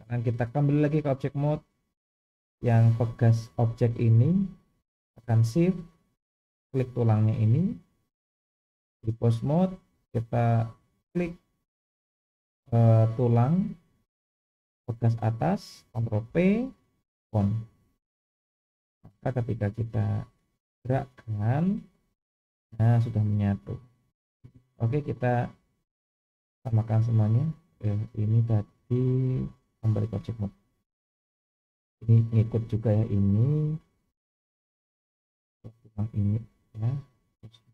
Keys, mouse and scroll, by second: 0.7-1.2 drag, 2.5 click, 7.1 shift+click, 8.5-9.2 drag, 10.8 click, 16.3 ctrl+p, 19.8-20.2 scroll down 2, 21.0 click, 22.0 g, 25.0-25.5 shift+middle drag, 25.7-26.8 scroll up 2, 27.5 click, 28.3 click, 29.6-30.1 drag, 31.2 click, 36.0 shift+click, 37.5-37.7 drag.